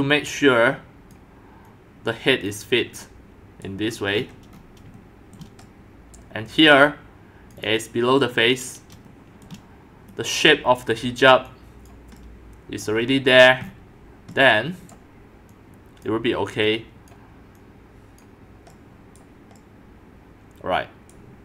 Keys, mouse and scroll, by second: 1.1 click, 3.9 scroll up 4, 4.1-5.4 scroll down 10, 5.4 shift+click, 6.2 right click, 7.2 right click, 7.6 right click, 7.6 click, 8.7 click, 10.5 scroll, 11.5 middle click, 11.9-13.0 drag, 13.0 middle click, 13.1 scroll up 4, 13.3 scroll down 4, 13.4-14.3 scroll up 7, 14.3-14.9 scroll up 1, 14.9-21.4 drag.